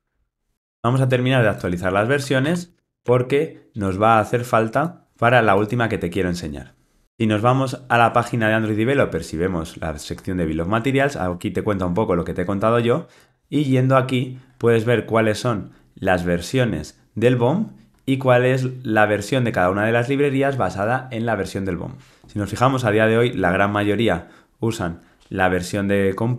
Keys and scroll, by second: 0.0 alt+Return.